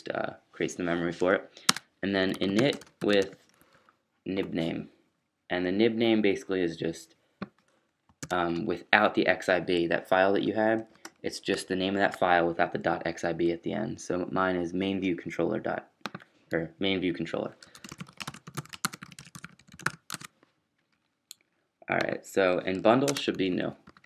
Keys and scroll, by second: 1.6-3.2 typing, 3.6 Escape, 4.1 Down, 8.2-12.0 typing, 17.7-20.6 typing, 22.9-24.0 typing.